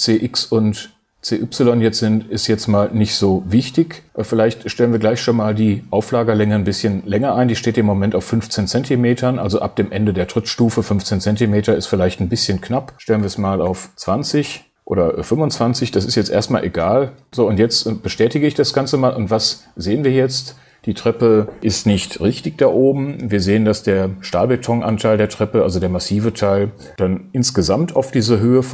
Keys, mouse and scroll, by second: 13.2 BackSpace, 17.6 click.